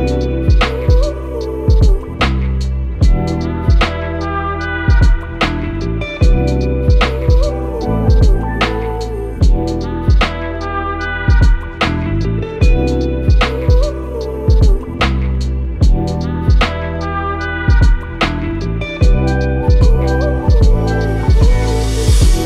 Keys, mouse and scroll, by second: 10.9-11.5 drag.